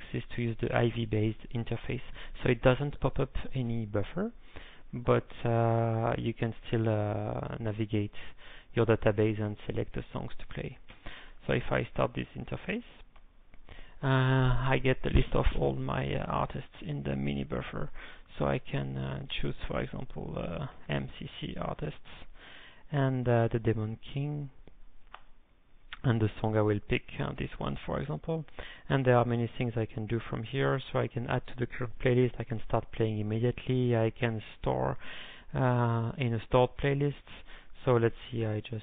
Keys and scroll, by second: 11.2 ctrl+., 12.2-13.0 typing, 19.9-21.2 typing, 22.1 Return, 23.2 ctrl+n, 25.1 Return, 26.7 ctrl+n, 29.3 alt+o.